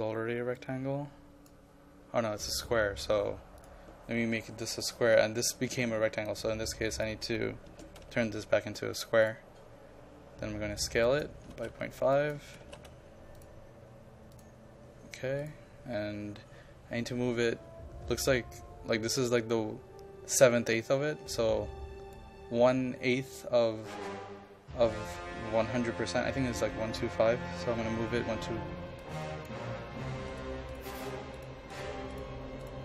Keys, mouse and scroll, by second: 7.8 KP_0, 8.1 KP_Decimal, 8.4 KP_5, 9.3 click, 11.3-12.8 typing, 12.2 click, 13.4-25.4 drag, 27.8 KP_1, 28.0 KP_2, 28.3 KP_8, 29.1 click, 29.6 KP_5, 30.4-31.8 drag.